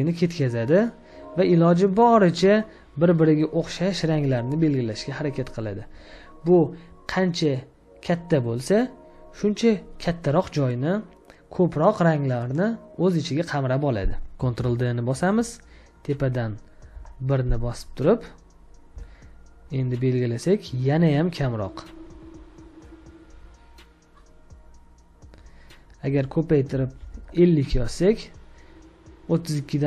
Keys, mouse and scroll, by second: 14.3 scroll down 1, 14.5 ctrl+d, 16.9 typing, 21.7 scroll down 1, 24.3-26.9 scroll up 1, 26.7-27.6 typing.